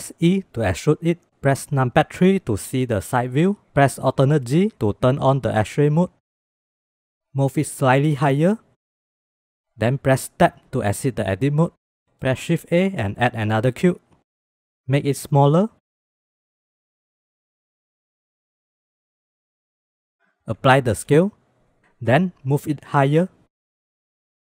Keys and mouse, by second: 0.2 e, 2.1 KP_3, 4.5 alt+z, 6.2 shift+middle click, 7.7 g, 10.3 Tab, 12.0 shift+middle drag, 12.8 shift+a, 15.6-20.1 drag, 16.5 BackSpace, 19.3 KP_0, 20.8 ctrl+a, 21.9 g, 24.1 shift+click.